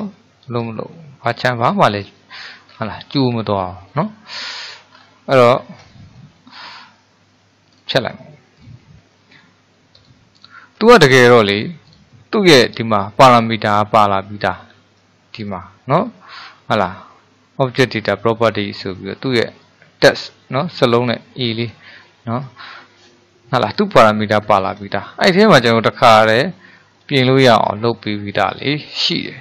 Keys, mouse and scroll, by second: 0.2-1.3 shift+middle drag, 1.3-1.8 scroll up 4, 2.2 shift+middle click, 2.8-3.5 scroll up 1, 3.5-5.0 shift+middle drag, 5.0-6.0 scroll down 5, 6.0-7.7 shift+middle drag, 7.7-9.5 drag, 9.5 middle click, 10.1 click, 10.4 drag, 10.8-11.9 scroll up 3, 11.9 click, 21.7 click, 24.5-25.0 scroll down 3, 25.0-26.1 shift+middle drag, 26.1-26.6 scroll up 2, 26.6-29.4 shift+middle drag.